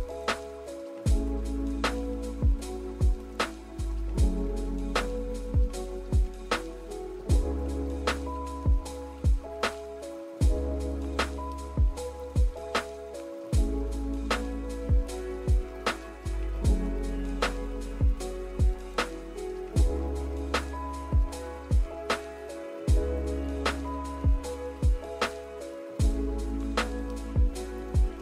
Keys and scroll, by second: 12.9 v, 19.4 z, 21.5-22.7 typing.